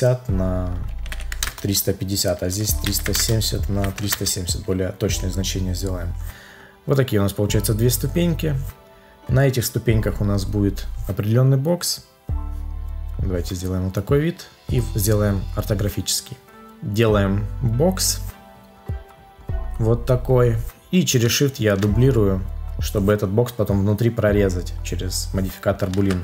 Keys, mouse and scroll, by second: 1.4 Return, 3.1 Return, 21.2 shift+click, 25.9 ctrl+z.